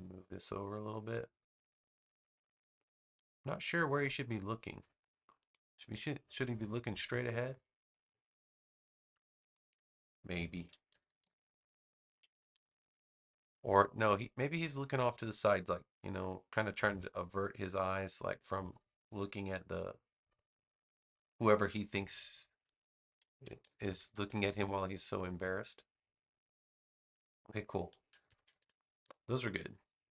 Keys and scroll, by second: 10.8 super+-, 12.3 super+=, 23.4 super+-, 28.0 super+=.